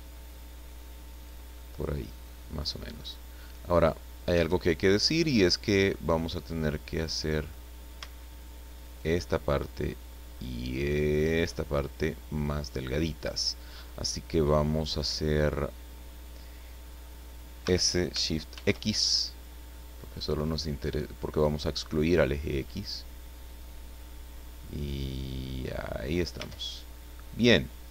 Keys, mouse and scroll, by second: 1.5-2.5 middle drag, 2.9 middle click, 3.8-4.1 scroll up 1, 4.3 a, 4.8 middle click, 5.8 scroll up 1, 6.2-7.6 middle drag, 8.8 alt+shift+right click, 11.1 alt+shift+right click, 11.6-12.1 scroll down 2, 12.4-13.6 middle drag, 13.8 scroll up 2, 14.9 scroll up 2, 17.6 s, 18.5 shift+x, 23.4 click, 24.0-25.8 middle drag, 26.0-27.0 scroll down 2, 26.4 Tab, 27.1-27.9 middle drag.